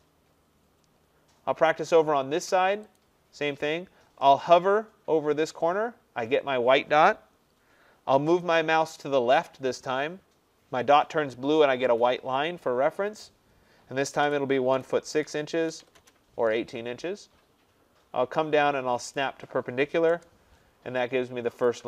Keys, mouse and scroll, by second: 0.3-0.7 scroll, 3.0 click, 3.7-6.9 scroll, 14.3-16.3 typing, 19.2 click, 20.2 Return, 21.7 click.